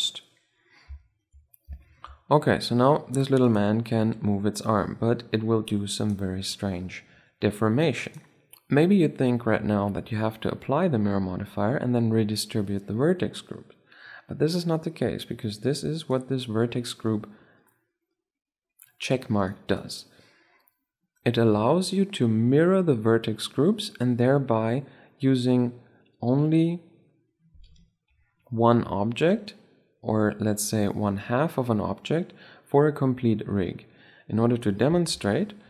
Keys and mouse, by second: 3.2-4.8 right drag, 3.7 r, 6.8 r, 15.2-17.5 drag, 19.1-21.2 drag, 34.8 shift+c, 35.5 middle click.